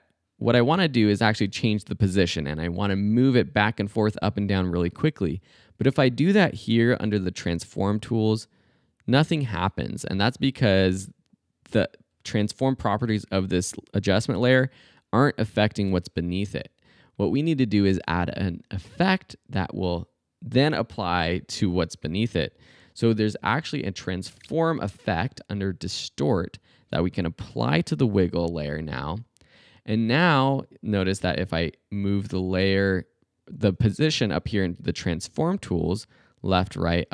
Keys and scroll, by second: 10.0 super+z, 22.7-24.9 typing, 35.1 super+z.